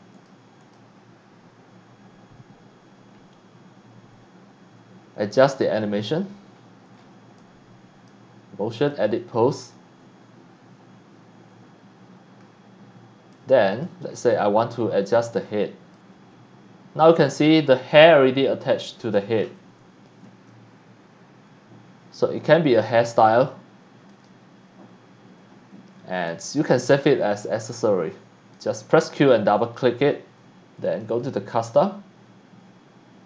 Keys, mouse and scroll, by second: 0.1 click, 0.6 click, 6.6-7.1 scroll up 4, 7.3 c, 7.4 click, 8.9 click, 13.3 click, 14.6 click, 15.2 e, 15.9-18.4 drag, 20.2 ctrl+z, 23.1 click, 24.1 click, 25.5 scroll up 1, 25.9 scroll down 1, 26.1 scroll up 1, 26.2 x, 26.3-28.6 drag, 26.9 c, 28.7 Tab, 29.2 click, 29.4 click, 31.0 click.